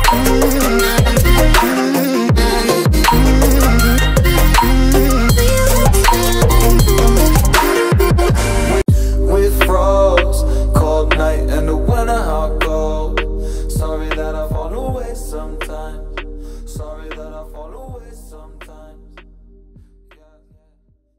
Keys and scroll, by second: 9.2 Return, 11.1 space.